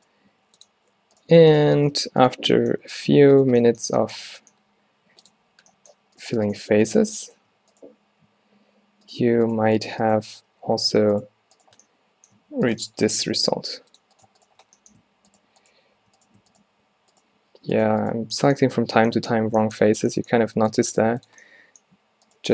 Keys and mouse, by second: 0.3 g, 4.4 e, 8.2 g, 10.6 f, 13.3 f, 13.7 g, 17.2-20.2 right drag, 19.0 f, 20.8-22.2 right drag, 20.9 g.